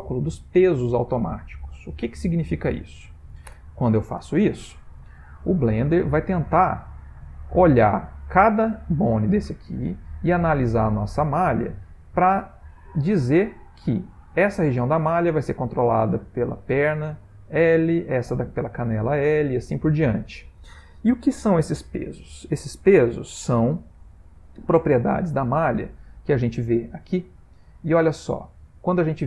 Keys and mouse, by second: 6.0 click, 6.8 ctrl+middle click, 7.5 middle click, 9.9 shift+middle click, 10.4 middle click, 10.6 middle click, 10.7 middle click, 10.7 shift+middle click, 11.7 middle click, 11.7 shift+middle click, 12.7 shift+middle click, 16.3 click, 19.6 shift+middle click, 23.3 click.